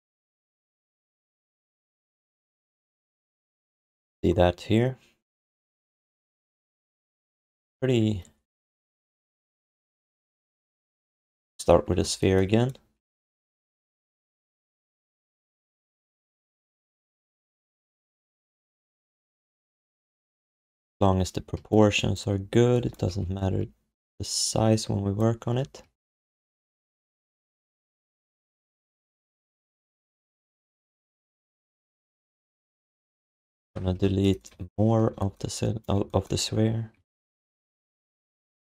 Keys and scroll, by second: 21.5 alt+q, 22.3 x, 23.1 r, 25.5 f, 29.6 q, 30.2 q, 35.9 w, 37.2-38.6 typing.